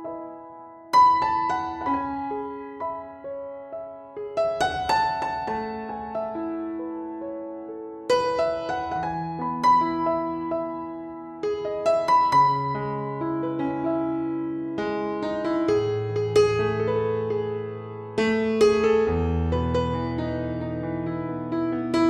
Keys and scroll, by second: 0.0 ctrl+a, 4.5 Down, 4.6 Down, 4.8 Down, 5.0 Down, 5.6 Down, 5.8 typing, 6.0 Up, 6.6 Down, 7.7 Down, 8.0 Down, 8.4 Down, 11.0 n, 11.7 BackSpace, 12.2 n, 13.1 shift+d, 15.0 shift+., 16.0 ctrl+a.